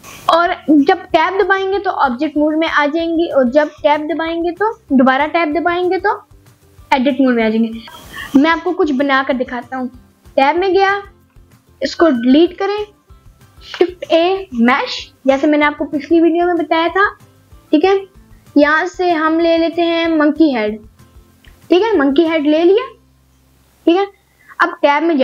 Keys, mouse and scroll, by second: 0.0 Tab, 1.6 click, 2.6 click, 7.0-8.4 scroll up 1, 8.4 middle click, 9.0 click, 9.4 click, 9.8 middle click, 10.6 click, 13.8 middle click, 14.6 middle click, 15.2 Delete, 15.2 shift+a, 22.0-22.4 scroll up 2, 22.4-23.5 middle drag, 23.8-24.1 scroll up 2, 24.1-24.5 middle drag, 24.7-25.2 scroll down 2.